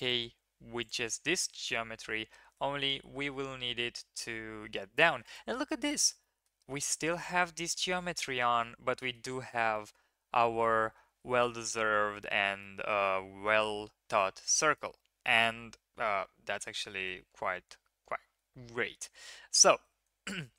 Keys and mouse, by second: 2.1 s, 6.2 drag, 8.3 middle click, 9.7 shift+middle click, 12.6-14.3 middle drag, 14.8-16.7 middle drag.